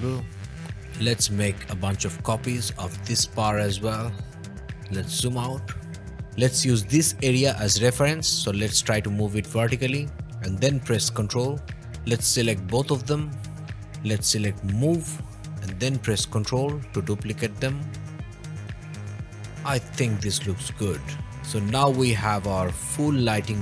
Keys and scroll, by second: 0.5 o, 1.8 m, 6.2 Escape, 13.6 m.